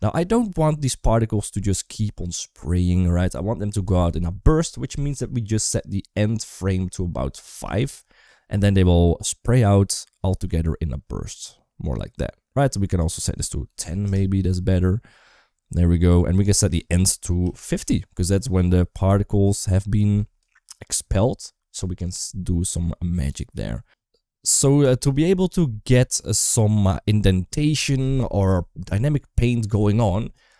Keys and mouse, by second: 6.1-7.3 drag, 12.8-13.9 drag, 16.5-17.6 drag, 24.8 shift+middle click, 25.6 shift+middle click, 25.9 middle click.